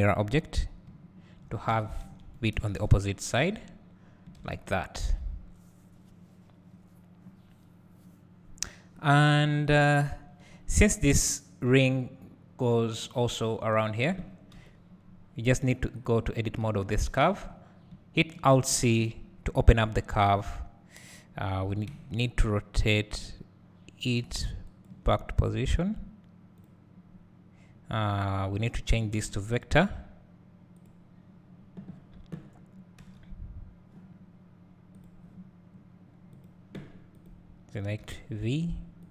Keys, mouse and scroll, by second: 0.9 `, 1.8 alt+a, 2.8 KP_0, 3.5 scroll up 1, 9.2 click, 14.5 KP_7, 15.3-16.1 scroll up 1, 24.7 r, 26.6-28.6 drag, 37.1 click.